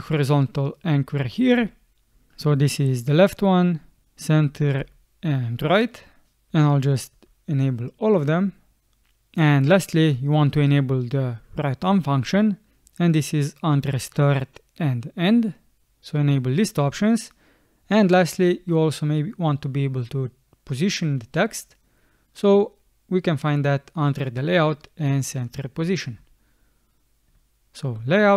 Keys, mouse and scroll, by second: 11.4 middle click, 11.8 middle click, 12.3 middle click, 26.0 scroll, 26.2 click.